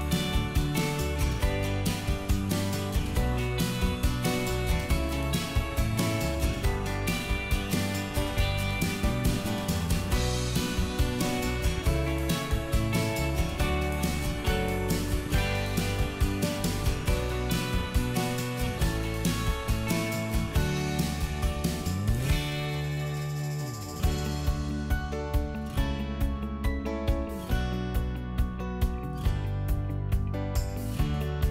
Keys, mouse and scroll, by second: 2.3 middle click, 4.3 ctrl+click, 5.8-8.5 middle drag, 8.8 scroll up 1, 9.1-11.6 middle drag, 11.9 shift+middle click, 12.8 click, 13.4 shift+click, 15.8 click, 17.9 shift+click, 18.9 click, 23.1 click, 23.7 middle click, 25.1 scroll down 1, 25.6-28.7 middle drag, 28.9 click, 30.1 middle click, 30.4 typing.